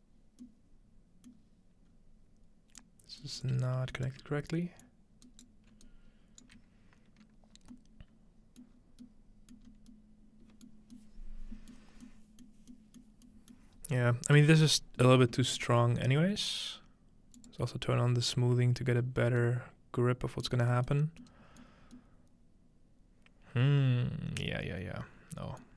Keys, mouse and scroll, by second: 1.9-2.8 scroll up 2, 2.8-5.7 drag, 2.8-3.4 scroll up 1, 3.2-5.5 right drag, 5.9 alt+click, 7.7-9.4 middle drag, 8.7-9.7 scroll down 2, 9.7 middle click, 9.7-10.6 scroll up 2, 10.6-11.6 scroll up 1, 10.7 middle drag, 11.6-14.5 scroll up 3, 12.5 middle click, 13.6 middle click, 14.5-15.5 middle drag, 14.5 scroll down 2, 15.8 scroll up 2, 17.4 click, 19.1 scroll down 2, 20.0-20.4 scroll down 2, 20.4 scroll up 2, 20.5 middle drag, 21.8 middle click, 21.8-22.1 scroll up 1, 24.0-25.3 scroll up 1, 25.3-25.6 scroll up 1.